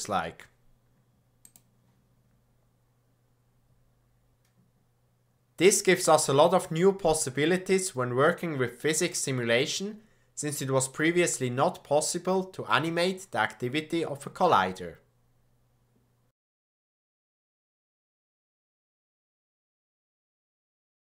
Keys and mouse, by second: 1.5 drag.